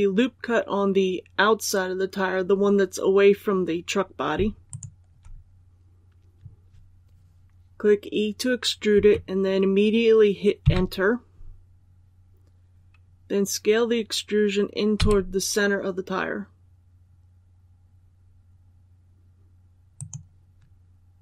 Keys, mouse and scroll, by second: 4.6 alt+right click, 8.8 e, 14.9 s, 19.9 click.